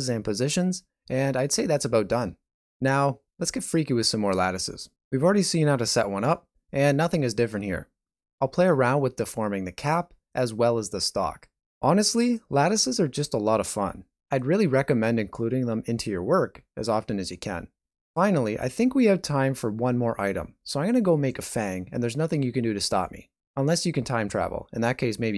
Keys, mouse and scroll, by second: 4.5 click, 4.7 click, 5.1 click, 5.5 middle click, 6.6 click, 7.6 click, 8.4 middle click, 9.2 right click, 9.2 g, 10.1 scroll down 1, 10.3 middle click, 11.0 right click, 11.2 middle click, 11.8 g, 12.8 shift+middle click, 13.0 shift+scroll down 1, 13.1 middle click, 13.8 right click, 14.0 g, 15.2 scroll down 1, 15.4 alt+shift+z, 15.6 middle click, 16.2 ctrl+middle click, 16.4 shift+middle click, 17.3 middle click, 20.2 Tab, 20.2 KP_1, 20.2 s, 21.9-22.6 scroll up 2, 22.6 e, 23.8 s, 25.0 ctrl+r.